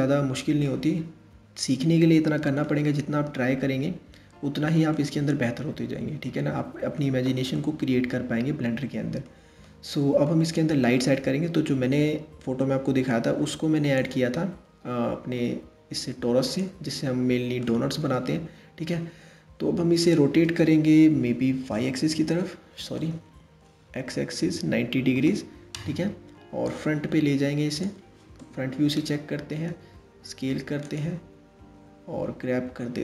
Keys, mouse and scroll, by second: 0.3-3.4 middle drag, 4.5-10.5 middle drag, 10.5-12.7 scroll down 2, 12.7 shift+a, 17.2-19.7 middle drag, 19.7 r, 26.3 click, 28.0 KP_1, 29.3 s, 31.8 g.